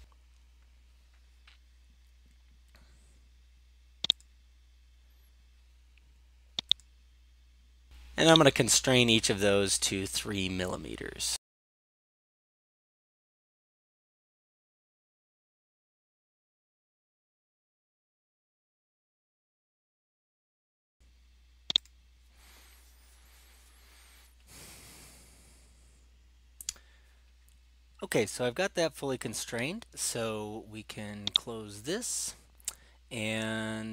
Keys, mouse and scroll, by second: 4.2 click, 6.7 click, 8.4 right click, 9.4-9.8 scroll, 10.6 click, 11.6 click, 12.3 click, 12.9 3, 13.1 Return, 13.4 right click, 14.0 click, 14.1-14.4 scroll, 15.8 click, 16.2 click, 16.7 click, 16.9 click, 17.3 3, 17.5 Return, 17.8 scroll up 7, 18.1 scroll, 18.1 right click, 18.9 click, 19.2 click, 19.6 click, 19.8 click, 20.1 click, 20.3 click, 20.7 4, 20.9 click, 21.8-23.0 right drag, 25.8-27.1 scroll down 4, 31.4-32.6 drag.